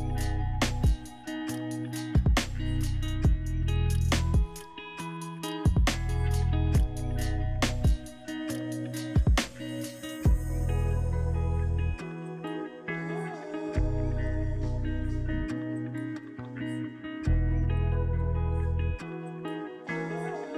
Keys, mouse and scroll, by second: 5.7-7.0 scroll up 2, 7.0-8.1 scroll down 3.